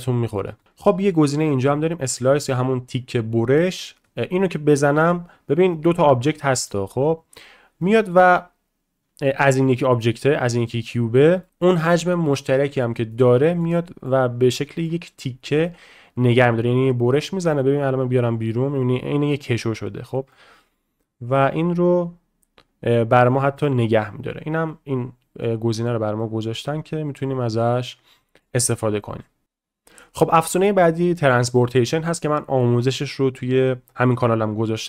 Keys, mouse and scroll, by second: 0.6 shift+middle click, 4.0 click, 7.8-8.1 middle drag, 10.9 middle click, 11.4 shift+middle drag, 11.5 g, 13.1 shift+middle click, 13.7-14.1 middle drag, 14.6 middle click, 15.6-16.3 shift+middle drag, 17.7-20.0 drag, 20.3-20.7 middle drag, 21.8-23.9 drag, 25.4-25.9 middle drag, 26.2-26.5 middle drag, 27.1-27.6 drag, 28.2 shift+middle drag, 28.6 middle click.